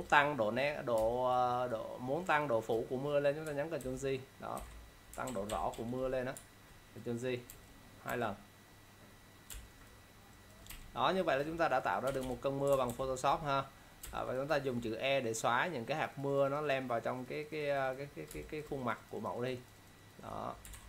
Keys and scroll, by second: 3.8 ctrl+j, 5.4 ctrl+0, 5.6 -, 7.6 ctrl+e, 9.6 ctrl+space, 10.8 e, 12.8 ctrl+-, 14.1 ctrl+space, 20.8 ctrl+0.